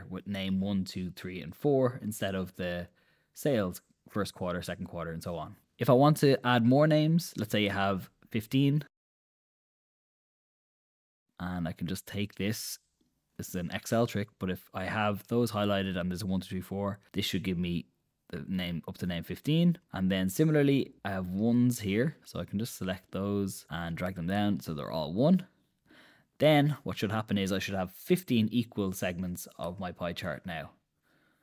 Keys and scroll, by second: 6.0 super+Tab, 30.0 super+Tab.